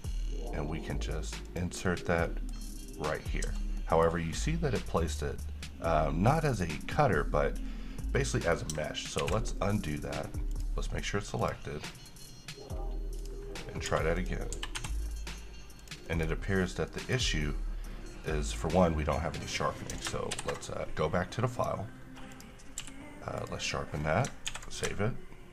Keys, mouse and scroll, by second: 1.6 click, 2.0 scroll up 1, 2.4 middle click, 3.4-3.7 scroll down 2, 3.9 middle click, 8.4 middle click, 9.3 ctrl+z, 10.7 click, 13.7 scroll up 1, 14.0 s, 14.3 click, 14.7 g, 14.9 y, 16.0 click, 16.2 middle click, 16.4-17.0 scroll up 1, 17.0-19.0 middle drag, 19.7-20.0 scroll down 1, 20.5 ctrl+shift+o, 21.7 click, 22.9 q, 23.5 click, 24.7 s.